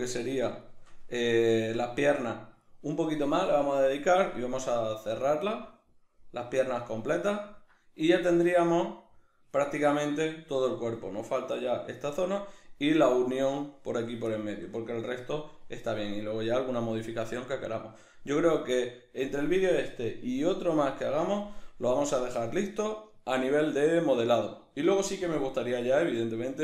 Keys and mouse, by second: 11.3 right click, 14.4-26.6 shift+middle drag.